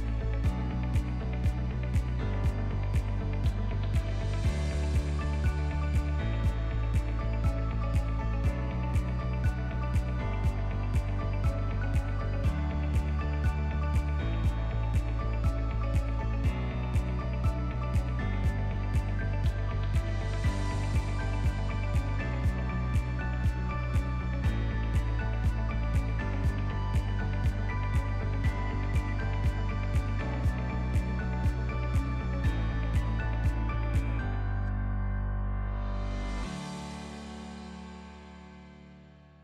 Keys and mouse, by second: 0.4 shift+middle click, 1.1 r, 2.8 g, 4.6 r, 8.6 g, 10.6-11.0 middle drag, 11.2 KP_7, 12.1 r, 13.7 g, 15.8 middle drag, 16.2-16.6 shift+middle drag, 17.4 ctrl+s, 17.9 shift+middle click, 18.4 ctrl+middle click, 19.0 shift+middle click, 19.7 ctrl+s, 24.0 shift+middle drag, 24.4 drag, 24.8 shift+s, 27.4 ctrl+middle click, 28.1 shift+a, 34.1 s, 36.0 r.